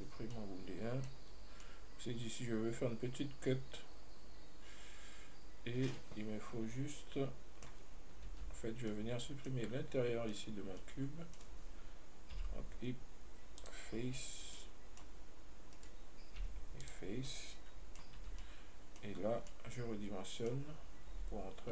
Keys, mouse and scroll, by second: 0.4 scroll down 2, 0.6-1.4 middle drag, 1.4-1.9 scroll up 3, 1.9-4.9 middle drag, 8.6 Tab, 9.0 scroll down 1, 9.1 middle click, 9.9-10.6 scroll up 1, 10.6 right click, 11.1-12.6 middle drag, 12.6 x, 14.8-16.0 middle drag, 16.0 right click, 16.7 x, 17.5 middle click, 18.4 Tab, 18.7-19.4 middle drag, 19.4 scroll up 1, 19.7-21.4 middle drag, 21.4 s.